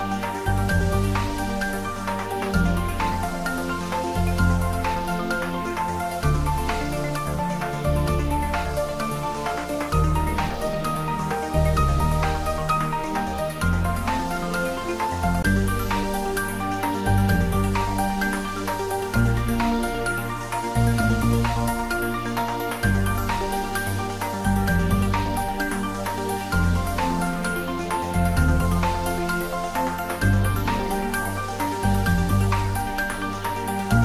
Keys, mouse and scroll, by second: 7.9 click, 8.6-9.2 scroll up 1, 10.4-11.6 typing, 12.1 Right, 13.6 click, 14.2-14.8 scroll down 1, 16.2 click, 18.8 shift+click, 19.3-20.0 scroll down 1, 20.7 shift+d, 30.6 click, 31.2 `, 31.7 3, 33.4 scroll down 1.